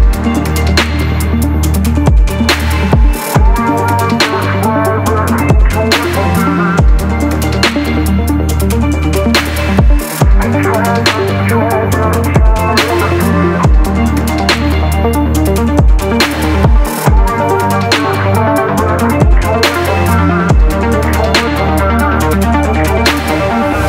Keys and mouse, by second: 2.5-3.6 drag, 3.7-4.9 drag, 9.3 shift+drag, 10.0 ctrl+s, 10.3 a, 10.5 a, 15.6 click, 16.4 click, 17.4 ctrl+s, 17.8 a, 17.9 a, 18.7 click, 19.5 click, 21.2 click, 22.2 click.